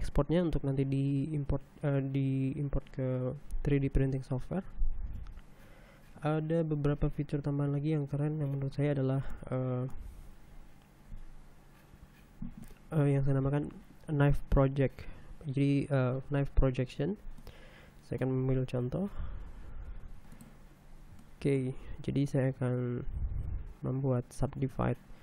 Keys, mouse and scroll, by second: 7.6 scroll up 1, 8.3 a, 9.6 shift+middle click, 10.6 middle click, 18.0-19.0 middle drag, 19.7 g, 20.3 z, 20.7 1, 21.0 middle click, 21.4 scroll down 1, 21.8 shift+middle click, 23.2 Tab, 24.7 w.